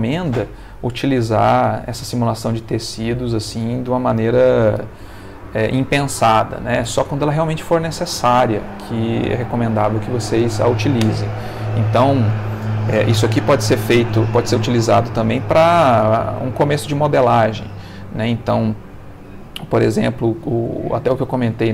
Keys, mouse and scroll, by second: 14.7 Escape, 15.5 ctrl+middle click, 16.5-17.7 ctrl+middle drag, 18.1 ctrl+middle click, 18.9-20.0 ctrl+middle drag, 20.2 shift+middle click, 21.5 shift+middle click.